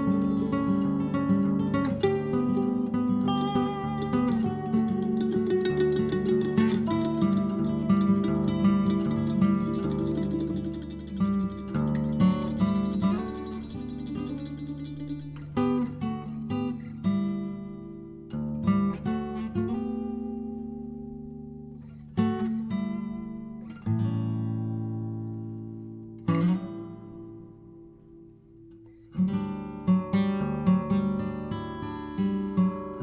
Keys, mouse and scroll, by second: 0.4 scroll down 1, 0.6-1.8 middle drag, 1.8-2.4 scroll up 2, 2.4 scroll down 1, 2.7 middle click, 3.5-5.4 drag, 5.4 scroll up 1, 5.7 click, 6.5-8.1 middle drag, 8.9-10.6 drag, 10.6 middle click, 11.2-12.7 drag, 12.7 right click, 13.6-15.0 drag, 15.0-16.5 middle drag, 16.7-18.7 drag, 18.7 scroll down 3, 18.9 middle click, 19.5-20.7 drag, 20.7-21.4 scroll up 1, 21.4-24.1 drag, 24.1 middle click, 24.9-28.1 drag, 28.1 middle click, 28.7 click, 29.7 middle click, 30.1 click, 31.0 middle click, 31.5-33.0 drag.